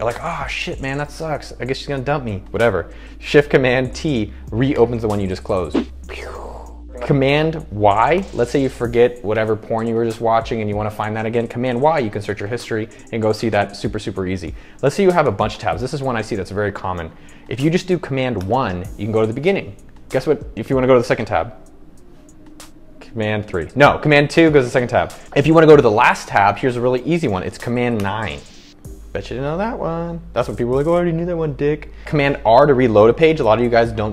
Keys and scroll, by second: 4.1 shift+super+t, 8.4 super+y, 15.5 super+t, 15.6 super+t, 18.6 super+1, 24.4 super+2, 25.2 shift+super+Right, 28.2 super+9, 33.5 super+r.